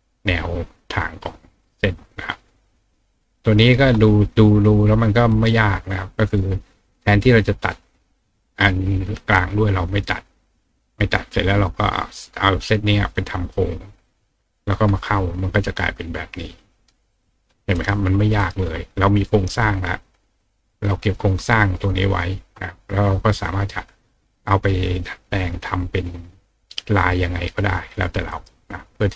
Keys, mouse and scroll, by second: 1.7-2.9 drag, 5.3 right click, 15.4-16.7 drag, 17.7 right click, 18.4 right click, 19.3-20.7 drag, 21.7 click, 28.3 right click.